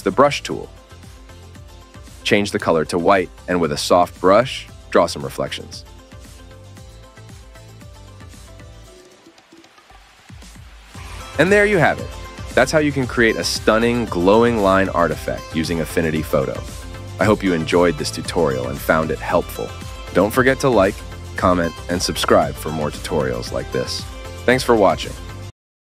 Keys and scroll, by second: 4.0 ctrl+scroll up 2, 4.1 ctrl+scroll, 4.4 ctrl+z, 4.7 ctrl+z, 4.8 ctrl+z, 5.5 ctrl+z, 5.5 ctrl+z, 5.5 ctrl+z, 6.2 ctrl+z, 6.8 ctrl+scroll down 3, 6.9-7.5 ctrl+scroll up 8, 7.8 ctrl+z, 7.9 ctrl+z, 8.1 ctrl+z, 8.3 ctrl+z, 8.4 ctrl+z, 8.9 scroll up 7, 9.1 ctrl+scroll down 7, 10.4 ctrl+scroll down 3, 10.8 ctrl+scroll up 4, 11.0 ctrl+scroll.